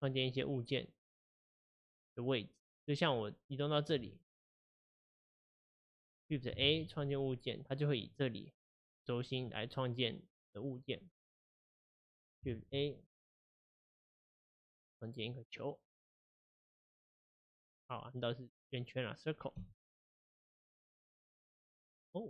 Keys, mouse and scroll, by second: 0.1-1.7 middle drag, 1.7-4.6 shift+right drag, 6.6 shift+a, 9.5-11.5 middle drag, 11.5 shift+right click, 12.5 shift+a, 16.1-19.6 middle drag, 19.6 x, 20.6-22.2 middle drag.